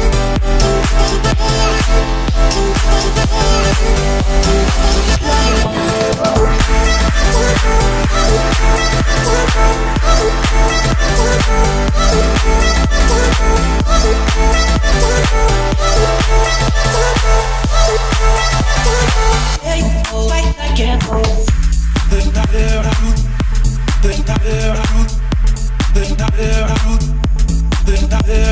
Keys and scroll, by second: 0.2 Escape, 2.9 Escape, 4.3 Escape, 8.8 Escape, 16.5 Escape, 27.6 1, 27.9 0, 28.3 Return.